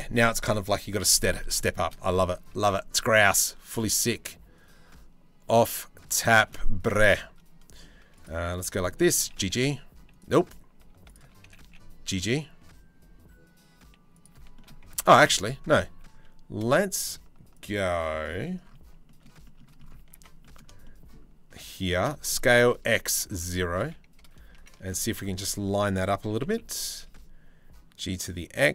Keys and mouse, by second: 1.4 shift+middle click, 2.1 ctrl+r, 3.3 ctrl+r, 5.9 middle click, 6.6 shift+middle click, 7.8 click, 8.4 shift+middle click, 8.8 g, 11.1 g, 14.6 ctrl+z, 15.0-16.6 shift+middle drag, 17.2 alt+middle click, 18.5 shift+middle click, 19.1 middle click, 19.8 1, 20.3-21.4 shift+middle drag, 21.9 s, 23.4 KP_3, 23.8 KP_1, 26.0 g.